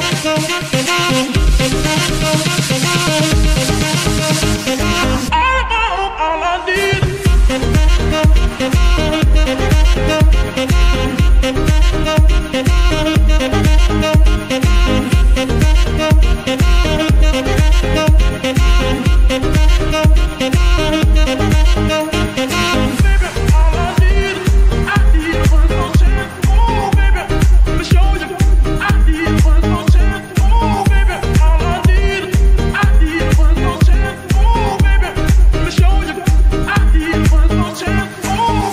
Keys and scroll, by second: 2.0 g, 4.8 KP_3, 5.6 g, 9.6-12.3 typing, 13.4 r, 16.2 g, 16.4 y, 16.9 Escape, 17.4 g, 17.9 Escape, 23.5 KP_1, 27.2 g, 28.1 ctrl+r, 37.1 KP_1, 37.2 Return.